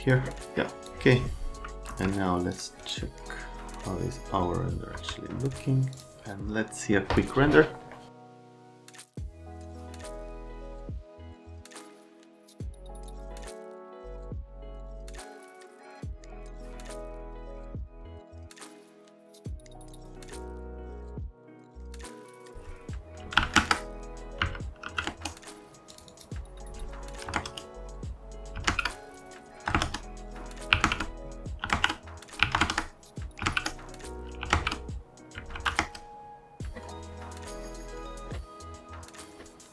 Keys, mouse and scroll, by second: 0.0 click, 0.8 click, 1.9 c, 2.5 click, 4.9 F3, 5.9 click, 9.5 click, 9.8 click, 14.5 click, 15.7 click, 16.5 click, 16.8 middle click, 17.1 middle click, 17.3 middle click, 17.5 middle click, 17.6 middle click, 17.8 middle click, 18.1 click, 19.0 click, 19.2 click, 19.4 click, 19.8 click, 21.5 click, 22.2 click, 23.2 KP_Decimal, 23.4 KP_1, 23.4 KP_2, 23.6 KP_Enter, 24.4 KP_Decimal, 24.8 KP_8, 25.1 KP_Enter, 25.9 click, 26.1 click, 27.3 KP_0, 27.4 KP_Enter, 28.6 KP_1, 28.7 KP_Enter, 29.7 KP_0, 29.8 KP_Enter, 30.7-33.4 typing, 30.8 KP_Enter, 31.7 KP_Enter, 32.6 KP_Enter, 33.4 KP_Enter, 34.4 KP_1, 34.5 KP_Enter, 35.4 KP_Decimal, 35.5 KP_9, 35.8 KP_Enter, 36.8 right click, 38.3 right click.